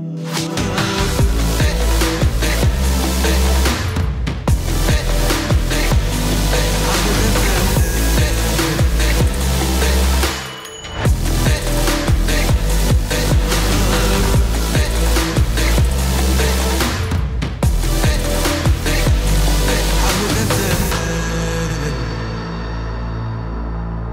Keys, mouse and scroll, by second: 3.9 space, 6.0-7.5 drag, 9.3 right click, 12.5 click, 13.9-14.8 typing, 16.1-16.8 drag, 22.3 click.